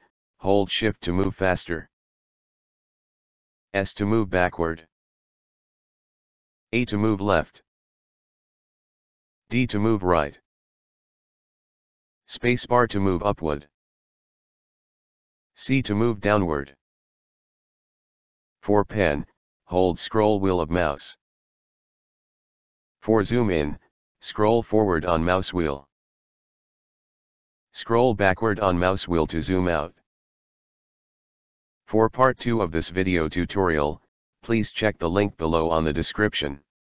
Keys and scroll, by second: 3.7 s, 6.5 a, 9.5 d, 12.2 space, 15.6 c.